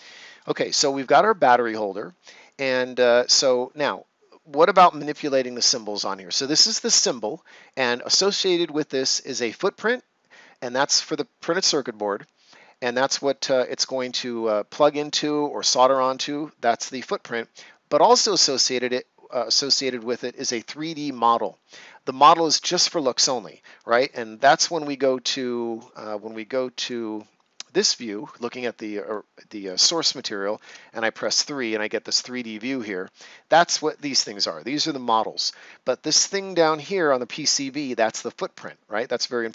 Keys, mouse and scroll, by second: 3.0 scroll up 1, 5.2-5.6 scroll down 1, 26.8 click, 29.0 right click, 30.6 3, 31.6 right click, 32.7 scroll up 1, 33.5 scroll down 1, 35.6 ctrl+scroll up 1, 39.1 right click.